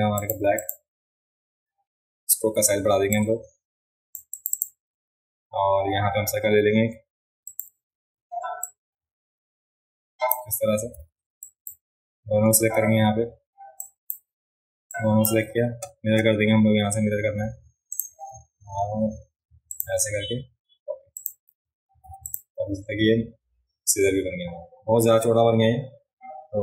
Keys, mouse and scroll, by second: 0.2 click, 0.6 click, 3.1-4.1 drag, 4.3 click, 7.5 click, 8.6-10.3 shift+drag, 11.4 drag, 13.8 drag, 14.9 click, 21.2 click, 22.0 v, 22.2 click, 22.8-23.3 alt+scroll down 1.